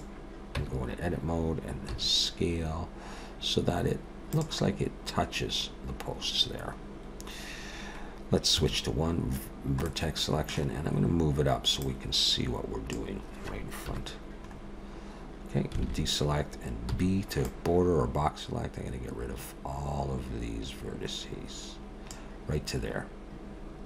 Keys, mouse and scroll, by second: 0.6 Tab, 1.9 s, 6.2-6.8 scroll up 1, 6.8 scroll down 1, 6.9-7.4 scroll down 1, 8.6 1, 9.9 middle click, 10.7-11.6 scroll down 2, 11.6 scroll down 1, 11.8 click, 13.8 KP_1, 14.4-15.4 scroll up 4, 15.8 alt+a, 17.5 b.